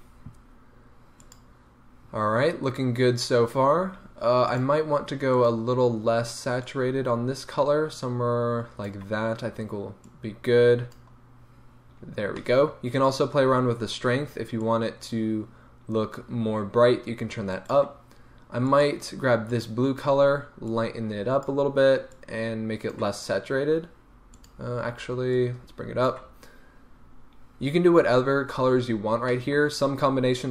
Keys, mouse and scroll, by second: 1.2 click, 4.5 click, 12.4-14.6 middle drag, 14.6-17.7 drag, 17.7 right click, 18.7-19.7 drag, 24.4 click, 28.0 scroll up 1, 29.3-30.5 middle drag.